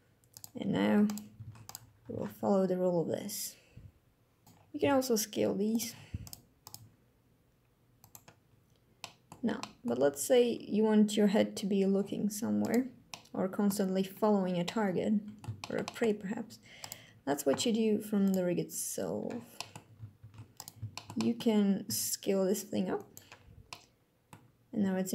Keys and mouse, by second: 0.7 click, 1.1 ctrl+Tab, 1.4-1.7 drag, 1.7 r, 1.8 z, 4.4 s, 4.5 s, 5.4 click, 5.9 click, 6.4 click, 6.4 g, 7.7 click, 8.7-9.1 drag, 9.4 click, 10.5 g, 12.9-13.4 middle drag, 14.5-15.5 middle drag, 15.7 click, 16.5 click, 17.9 click, 19.2 click, 19.9 ctrl+Tab, 20.3 click, 20.6 shift+drag, 20.8 drag, 21.5 s, 22.7 click, 23.4-24.0 drag, 24.5 g.